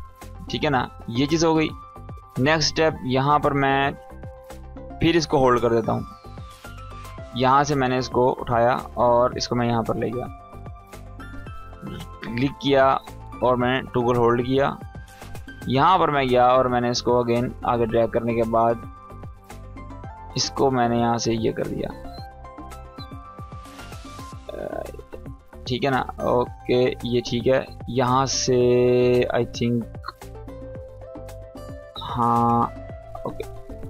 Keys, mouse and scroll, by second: 0.4-4.2 drag, 11.7 right click, 13.2-15.4 drag, 18.3-19.6 drag, 21.8 space, 23.2-23.8 click, 24.0 space, 25.0-25.6 drag.